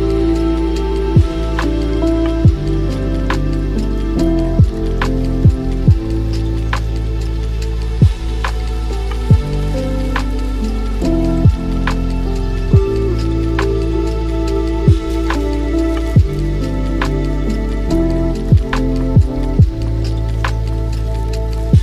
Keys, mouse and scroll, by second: 1.7 click, 2.1-5.9 middle drag, 5.9 ctrl+a, 7.3 scroll down 2, 8.3 click, 10.4-11.5 drag, 11.5-11.9 scroll up 3, 13.0 click, 14.2-15.9 drag, 15.9 space, 16.3 scroll down 3, 17.7 space, 18.0-19.6 scroll down 11, 19.6-21.8 drag.